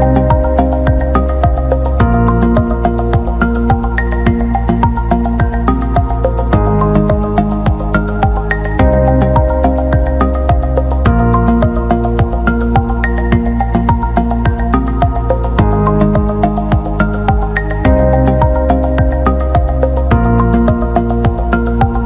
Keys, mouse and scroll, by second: 0.3 click, 0.9 click, 2.2 click, 4.4 click, 5.0 click, 5.9 click, 6.5 click, 7.5 click, 7.8 click, 8.2 drag, 12.1 click, 14.5-15.6 drag, 19.6-21.2 drag, 21.4 click.